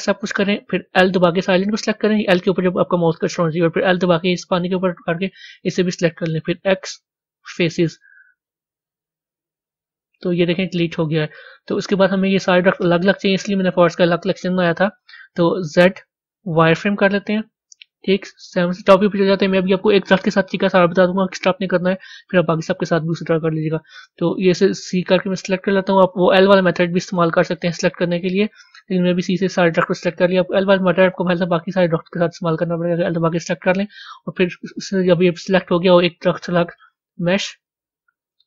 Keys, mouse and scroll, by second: 10.9-18.8 middle drag, 18.8-19.7 scroll down 1, 19.7-38.4 middle drag.